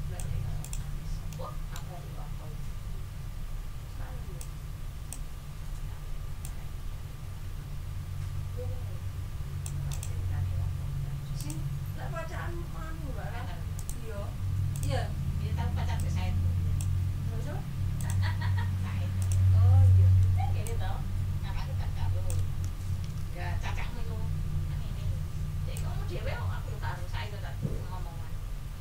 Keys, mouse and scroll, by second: 0.6 ctrl+middle click, 0.9 ctrl+scroll down 2, 1.3 ctrl+middle click, 3.7 ctrl+scroll up 2, 4.4 ctrl+click, 6.4-9.8 drag, 9.9 click, 10.3 ctrl+scroll up 2, 11.4 click, 13.7 right click, 14.7 click, 15.9-16.9 ctrl+drag, 18.0 click, 19.2 click, 20.6-22.5 shift+drag, 22.6 ctrl+shift+z, 25.7-28.8 ctrl+shift+drag.